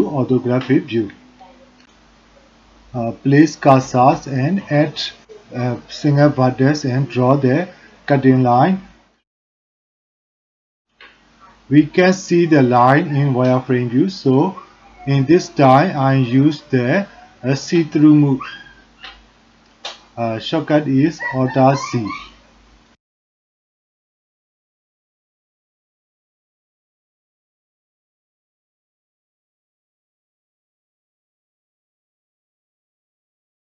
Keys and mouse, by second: 2.2-3.3 drag, 4.7 g, 6.3 e, 7.0 e, 9.0 click, 12.3 e, 13.8 shift+z, 14.1 shift+z, 14.8 shift+z, 15.9 alt+z, 16.6 alt+z, 16.8 alt+z, 17.2 click, 17.9 click, 18.3 g, 19.1 g, 19.7 click, 20.1 g, 20.7 click, 21.7 click, 21.8-25.6 typing, 22.7 click, 22.9 alt+z, 23.2 click, 24.0 click, 25.0 click, 25.4 click, 25.8 click, 26.6 a, 27.0 f, 28.0 Tab, 28.1 click, 28.3 shift+click, 28.5 click, 29.0 click, 29.4 click, 30.1 click, 31.5 click, 32.0 shift+click, 32.1-32.5 middle drag, 32.9 middle click, 33.1 middle click.